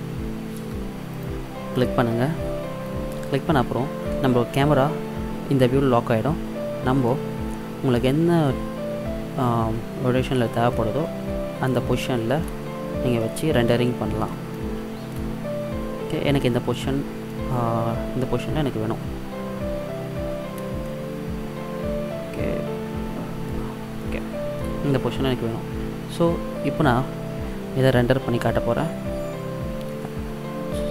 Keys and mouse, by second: 1.2-3.0 drag, 3.2 n, 7.1-7.5 middle drag, 11.2-12.0 middle drag, 12.0 middle click, 12.2 middle drag, 12.3 middle click, 19.3-20.9 middle drag, 22.9-24.1 middle drag.